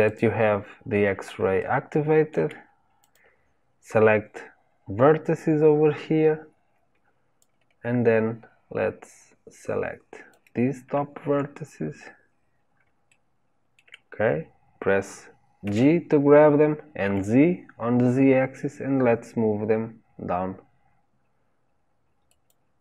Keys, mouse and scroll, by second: 1.5-2.9 shift+middle drag, 2.9 click, 7.3 click, 11.6-12.2 scroll up 2, 13.0-15.6 shift+middle drag, 15.6 g.